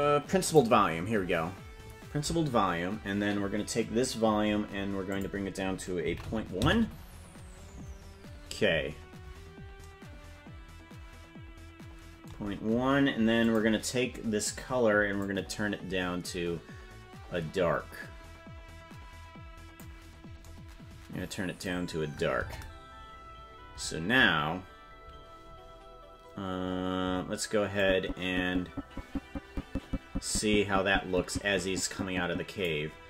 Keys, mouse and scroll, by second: 5.1-8.5 drag, 13.8 click, 22.7 KP_0, 27.9-33.0 drag.